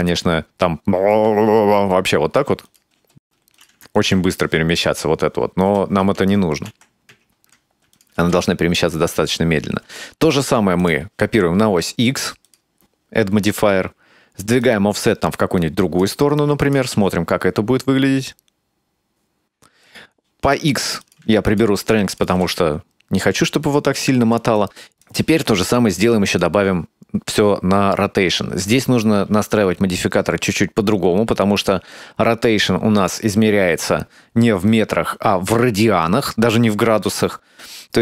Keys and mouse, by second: 0.1-1.1 drag, 1.8 space, 2.7 drag, 3.0 space, 3.7 click, 5.7 space, 6.2 ctrl+z, 6.7 ctrl+z, 7.1 ctrl+z, 8.0 click, 8.2 space, 9.9 space, 10.8 click, 12.6 click, 14.6-16.1 drag, 16.6 click, 16.8 space, 19.7 space, 21.1 click, 22.1 click, 22.3 space, 24.2 space, 24.6-25.1 drag, 26.3 click.